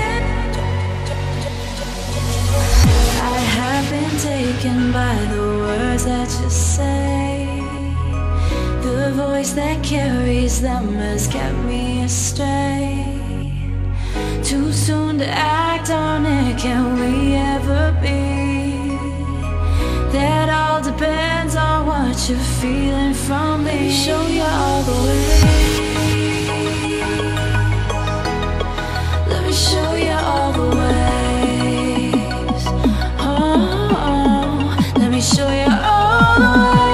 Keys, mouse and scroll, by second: 1.3 click, 2.5 Up, 3.5-4.3 drag, 7.3-9.9 drag, 15.6 ctrl+click, 17.0-19.4 shift+drag, 21.4-24.6 drag, 25.0 Down, 29.5 click, 29.8 BackSpace, 30.5-31.0 drag, 33.4 Return, 36.5 click.